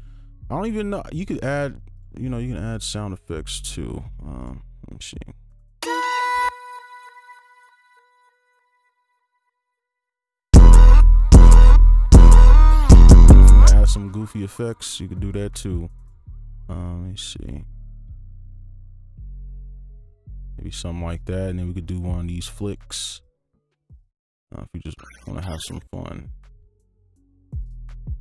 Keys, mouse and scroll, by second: 3.2-5.8 scroll down 1, 5.8 space, 6.4 space, 9.9 right click, 10.5-13.6 typing, 13.9-17.0 scroll up 1, 19.3 right click, 19.3-21.2 scroll up 1, 21.2 Right, 21.8 alt+click, 23.2 alt+click.